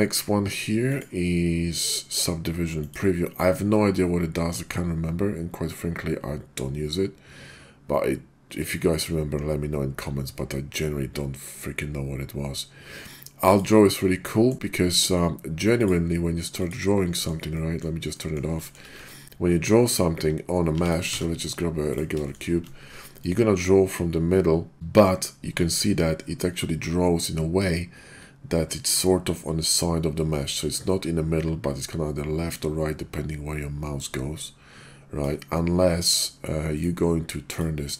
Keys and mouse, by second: 0.9-14.0 drag, 14.1-14.5 middle drag, 14.9 middle click, 15.7-17.2 drag, 17.4-17.8 middle drag, 18.1 middle click, 18.6 shift+click, 20.7 x, 21.1 shift+a, 23.2-35.2 ctrl+drag, 36.7 click, 37.6-37.9 drag.